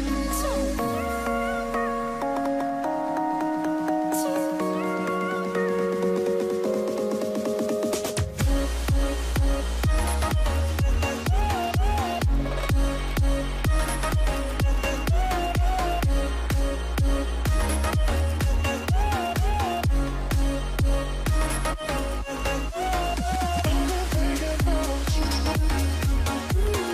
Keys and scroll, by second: 2.1 Right, 3.3 Left, 3.7 Left, 4.0 Down, 8.3 Right, 16.2 ctrl+g, 18.6-19.3 typing, 19.6 Return, 21.8 ctrl+z, 21.8 typing, 23.8 ctrl+g, 24.5-24.9 typing, 25.0 Return, 26.4 ctrl+g.